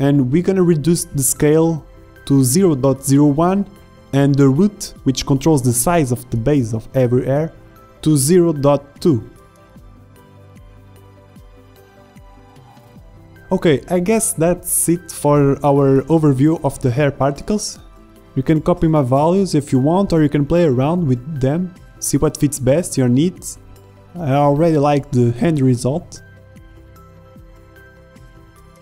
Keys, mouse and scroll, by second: 1.8 shift+z, 6.4 middle click, 6.7 middle click, 7.2 KP_0, 8.8 middle click, 9.1 middle click, 11.3 click, 12.4 middle click, 14.0 click, 16.3 click, 16.4 middle click, 16.7 middle click, 16.7 click, 19.8 z, 22.5 shift+z, 24.7 z, 26.5 z.